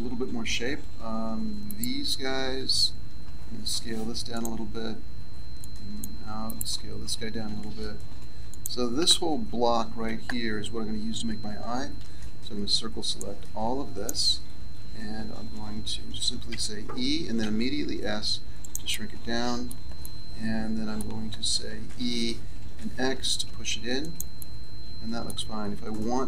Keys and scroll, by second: 3.6 s, 7.4 s, 9.7 a, 11.9 c, 16.4 e, 21.8 e.